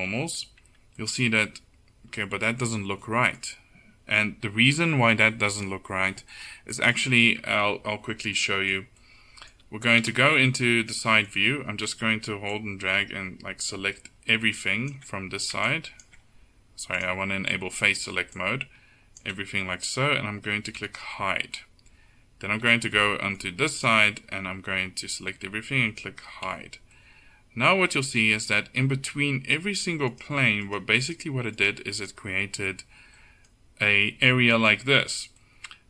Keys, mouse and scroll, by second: 0.7 Tab, 7.5 Tab, 10.1 a, 20.9 h, 26.5 h, 29.7-32.6 middle drag.